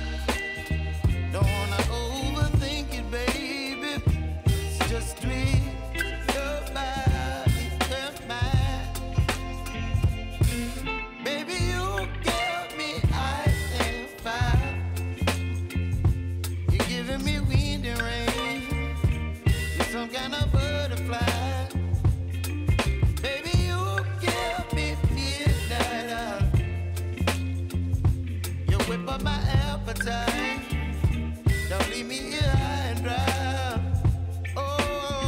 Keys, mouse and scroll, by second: 8.4 ctrl+alt+Home, 9.0 v, 9.8 alt+scroll up 1, 10.7 click, 12.0 y, 12.5-15.1 drag, 16.9 p, 17.6 click, 17.9 right click, 19.2 click, 21.2 =, 22.5 click, 25.2 v, 25.6-30.8 drag, 32.7 ctrl+c, 32.9 ctrl+v, 33.9 click, 34.3 space.